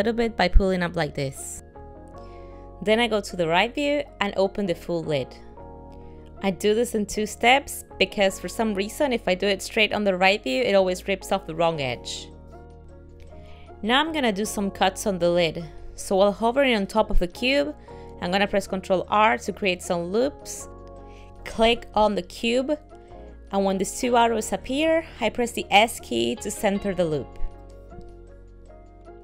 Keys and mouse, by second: 3.3 KP_3, 5.5 g, 12.9 middle click, 19.6 ctrl+r.